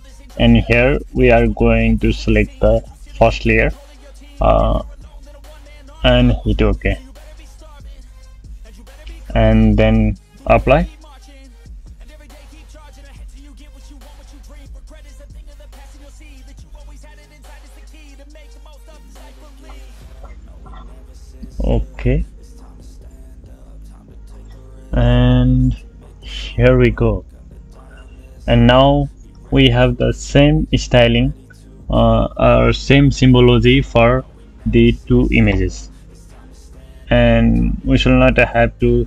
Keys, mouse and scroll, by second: 26.7 click.